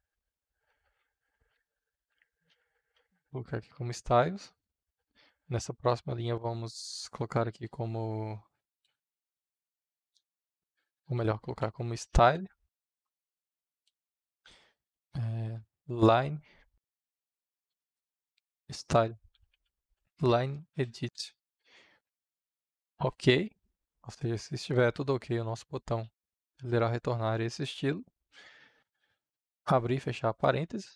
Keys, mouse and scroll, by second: 1.0-3.3 typing, 4.2-5.8 drag, 5.8 Tab, 8.5-9.6 typing, 10.0 Return, 10.9-12.8 typing, 15.2-16.7 typing, 17.5 Return, 19.0-21.7 typing, 22.8 shift+o, 23.1 k, 25.7 space, 28.1 space, 30.2 shift+9.